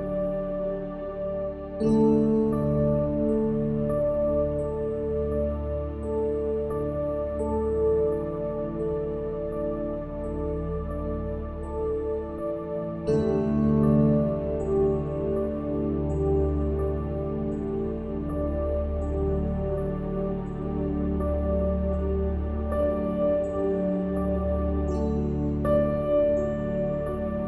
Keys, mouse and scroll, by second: 0.7-2.5 drag, 6.5-8.5 ctrl+alt+shift+drag, 24.1 KP_1, 26.2-27.4 drag.